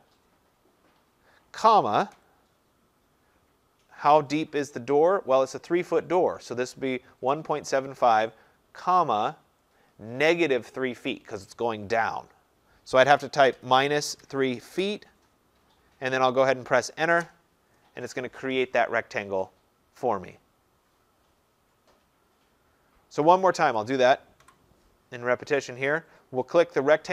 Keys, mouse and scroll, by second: 13.6-14.9 typing, 17.2 Return, 19.4 scroll, 22.4 scroll, 23.5 click, 23.8 click, 24.5 Delete.